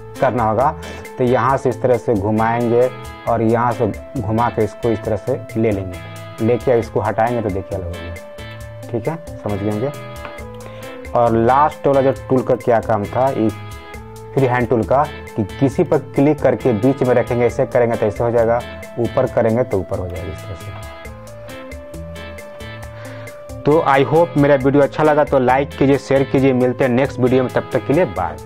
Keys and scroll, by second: 9.7 ctrl+z.